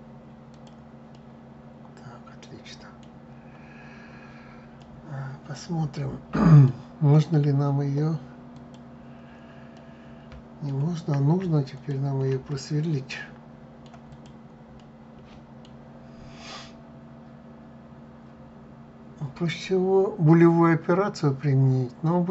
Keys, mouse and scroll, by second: 0.8-3.9 middle drag, 4.5-7.5 middle drag, 8.2 click, 9.4-11.4 middle drag, 11.4 shift+click, 12.2-13.8 middle drag, 13.8 click, 14.4-17.5 middle drag, 19.2-22.3 middle drag.